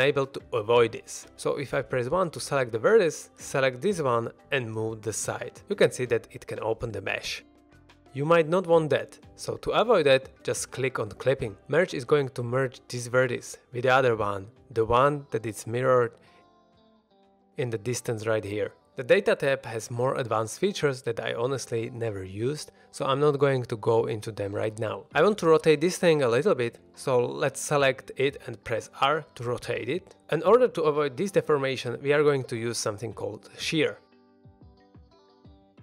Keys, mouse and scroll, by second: 0.3 click, 0.4 1, 1.1-1.7 scroll down 1, 1.7 1, 3.1 click, 3.6 middle click, 4.1 g, 4.4 x, 4.9 click, 5.1-5.5 middle drag, 5.8 click, 6.0 middle drag, 6.2 g, 6.4 x, 6.8 click, 7.0-7.6 middle drag, 7.9 click, 8.2 ctrl+z, 8.2 middle click, 8.5 ctrl+z, 9.0 ctrl+z, 9.2 ctrl+z, 11.0 click, 14.0 g, 14.7 right click, 15.0 middle drag, 18.7 click, 24.5 r, 24.6 middle click, 25.9 click, 26.2 middle click, 26.5 middle click, 26.7 middle click, 27.3 r, 27.6 x, 28.0 y, 29.4 ctrl+click, 29.6-30.1 middle drag, 30.7-31.0 middle drag, 31.7-32.6 middle drag, 34.9 middle click.